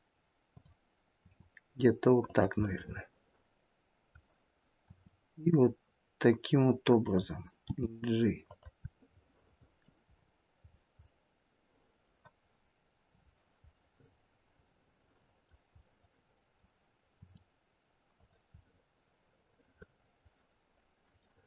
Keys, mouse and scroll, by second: 1.2 r, 2.6 middle click, 4.9 r, 7.6 g, 8.9 middle click, 10.1-11.1 scroll up 5, 11.1 middle click, 11.1-11.8 scroll up 4, 11.9 middle click, 13.1 click, 13.7 middle click, 15.8 middle click, 17.1 r, 18.6 middle click, 21.2 middle click.